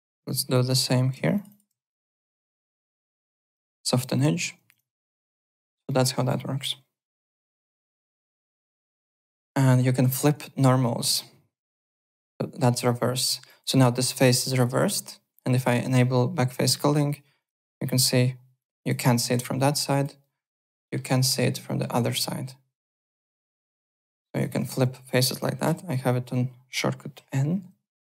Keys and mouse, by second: 0.0 w, 0.2 click, 0.5 2, 0.7 click, 1.3 click, 2.3 click, 3.7 click, 4.3 middle click, 4.6 `, 4.7 click, 5.0 right click, 5.2 click, 5.5 click, 5.8 alt+middle click, 6.1 alt+right click, 7.0-7.9 typing, 7.8 alt+middle click, 8.2 click, 9.2 alt+Tab, 10.0 click, 10.4 middle click, 11.1 click, 12.8 click, 13.4 click, 13.7 right click, 14.5 click, 15.8 click, 16.6 click, 16.9 alt+click, 17.3 click, 17.6 alt+click, 18.6 alt+click, 19.0 alt+middle click, 19.4 alt+click, 20.2 alt+right click, 20.5 alt+middle click, 21.8 alt+right click, 23.3 alt+click, 23.8 alt+middle click, 24.0 alt+click, 24.3-25.6 typing, 24.4 click, 24.9 click, 26.1 alt+click, 28.0 click.